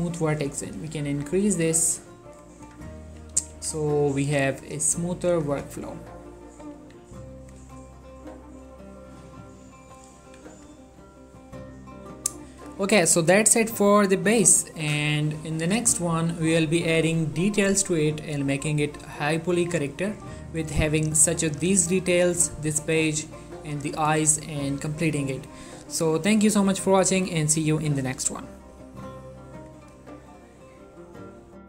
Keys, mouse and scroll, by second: 2.7 Tab, 3.2-4.4 typing, 5.3 click, 5.5 Tab, 6.0 ctrl+middle click, 6.9 ctrl+a, 7.2 ctrl+click, 7.5 click, 7.8 shift+middle click, 8.2-10.4 middle drag, 8.7-10.3 middle drag, 10.4 1, 11.3-15.7 middle drag, 15.8 middle click, 16.8 ctrl+middle click, 17.4 middle click, 29.7 click.